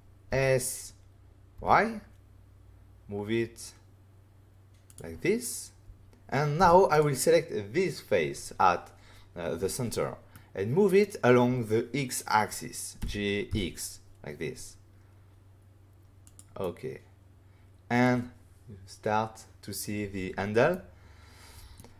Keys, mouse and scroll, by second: 0.2 s, 1.5 y, 4.8 click, 6.5 ", 6.8 click, 10.3 middle click, 13.0 g, 13.4 x, 16.2 click, 16.6 middle click, 20.6 middle click.